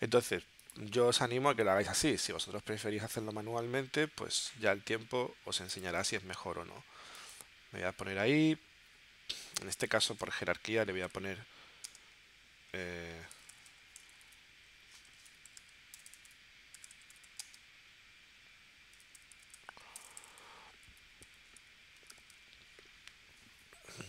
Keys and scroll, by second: 10.2 0, 11.9 space, 13.5 t, 14.0 BackSpace, 15.3-22.8 typing.